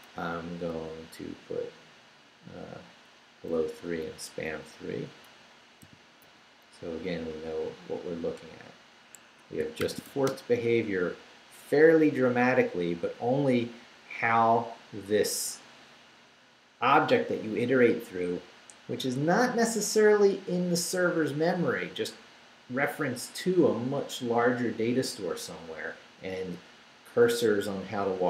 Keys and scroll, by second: 0.3 Right, 3.6 Down, 4.5 Up, 5.0 Right, 5.8 i, 6.2 3, 6.7 Left, 8.0 Down, 8.4 3, 9.2 Escape, 9.8 shift+;, 10.1 shift+w, 10.3 Return, 10.9 Down, 12.6 Down.